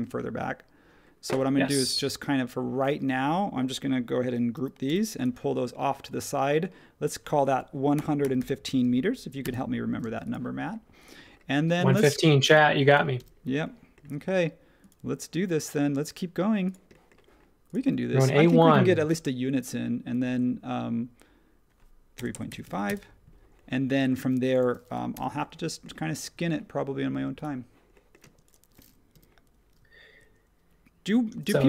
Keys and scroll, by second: 4.5 super+g, 4.8 m, 7.7-8.9 typing, 9.4 Return, 10.0 space, 13.1 m, 21.9-23.1 typing, 24.2-25.1 typing, 28.2 space, 29.1 m, 31.3 super+1.